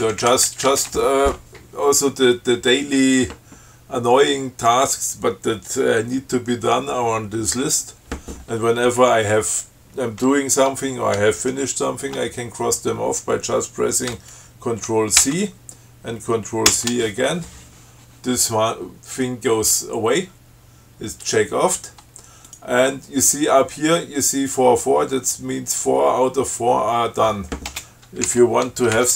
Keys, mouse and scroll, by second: 0.1 Up, 0.7 Down, 8.0 scroll up 2, 9.5 Up, 15.5 ctrl+c, 17.0 ctrl+c, 22.7 click, 28.0 space, 28.5 alt+8.